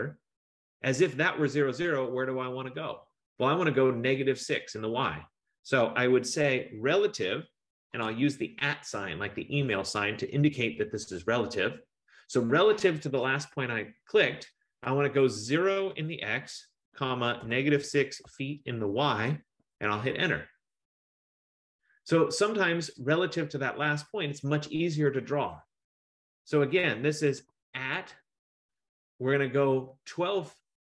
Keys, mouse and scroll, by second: 7.9 shift+2, 16.0-18.4 typing, 19.7 Return, 24.3 Return, 27.9 typing.